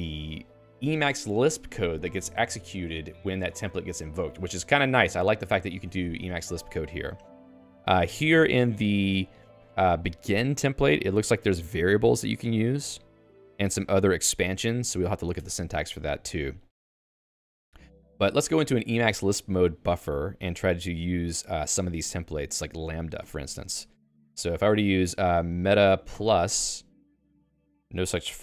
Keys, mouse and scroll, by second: 0.0-0.9 typing, 6.2-22.7 typing, 15.9 ctrl+s, 23.2 ctrl+alt+j, 24.0 Return, 24.6 i.